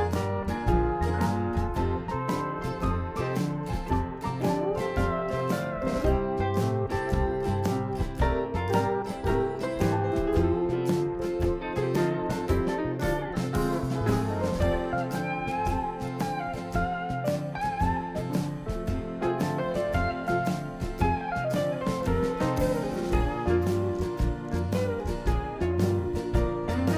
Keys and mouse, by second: 0.8-4.1 right drag, 2.1 e, 4.8-7.8 right drag, 6.1 e, 8.3 s, 10.1-11.4 drag, 13.3-14.3 drag, 14.3 Tab, 14.8 click, 15.3 Tab, 17.3-18.6 drag, 19.1 ctrl+r, 21.0 ctrl+r, 26.6-26.9 right drag.